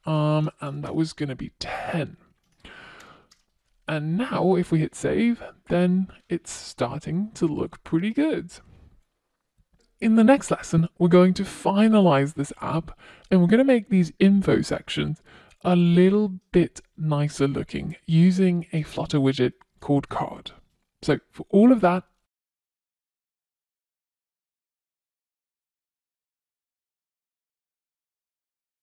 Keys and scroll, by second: 0.0 super+s.